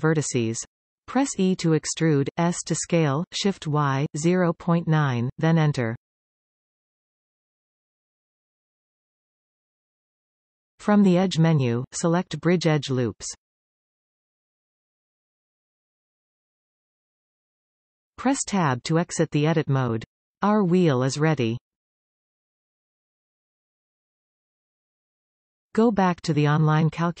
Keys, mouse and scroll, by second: 1.2 alt+shift+click, 1.7-3.1 middle drag, 3.1 alt+shift+click, 3.6-4.5 middle drag, 4.5 e, 8.7 Return, 9.6 middle click, 10.4-11.2 scroll up 2, 14.5-17.0 drag, 17.0-27.2 middle drag, 17.3-18.9 scroll down 2, 18.9-20.0 scroll down 1, 20.0 Tab, 20.6-21.0 scroll up 2, 24.8-25.2 scroll down 2.